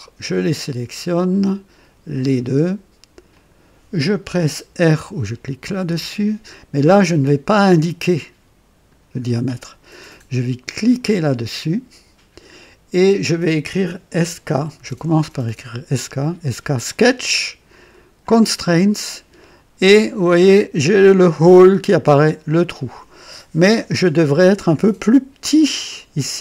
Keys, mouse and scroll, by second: 0.3 click, 2.0 click, 3.2 click, 5.7 r, 7.5-9.1 drag, 10.8 click, 10.8 typing, 14.0-14.7 typing, 16.8 click, 18.1 click, 22.4 click.